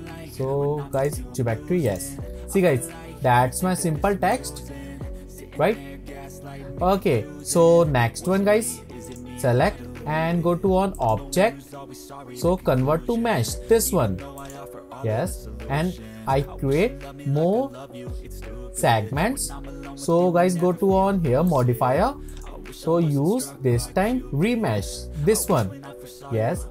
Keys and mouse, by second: 0.0-1.2 drag, 1.9 click, 2.7 middle click, 4.4-7.4 middle drag, 11.1-12.8 drag, 14.3 click, 22.3-25.7 drag.